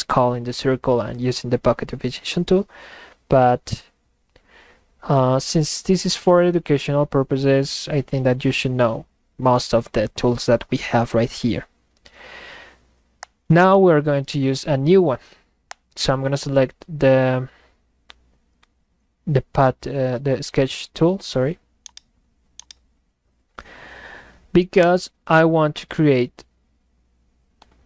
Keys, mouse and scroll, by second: 13.2 click, 15.7 click, 21.8-22.3 middle drag, 21.9 right click, 22.5-23.1 middle drag, 22.7-23.1 right drag, 23.3 middle click, 24.8 click.